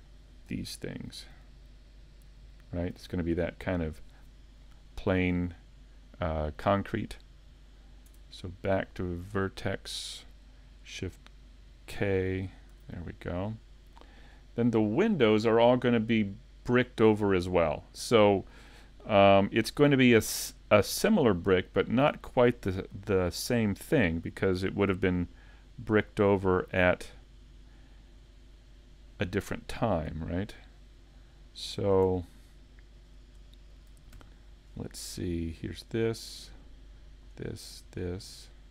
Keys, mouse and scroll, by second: 0.5 l, 5.0 scroll down 2, 5.4 middle click, 8.1 Tab, 11.9 shift+k, 12.7 a, 13.3 middle click, 19.4 middle click, 24.8 click, 30.0 middle click, 31.8 a, 33.1 scroll up 2, 33.5 shift+middle click, 34.2 c, 38.5 right click.